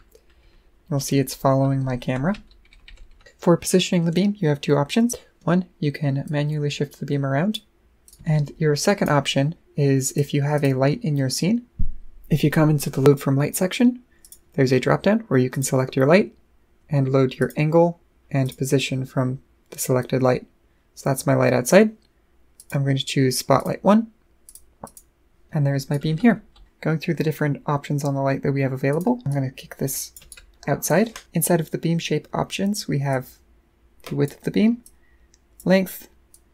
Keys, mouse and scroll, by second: 6.2-7.5 drag, 8.0 click, 8.1 right click, 10.1 click, 10.5 click, 14.2 click, 15.5 click, 17.4 click, 18.4 click, 22.6 click, 23.6 click, 24.5 click, 24.8 click, 25.9 right click, 28.9 click, 29.3 click, 30.3 right click, 33.1-34.3 drag, 34.8 click, 36.3-36.5 drag.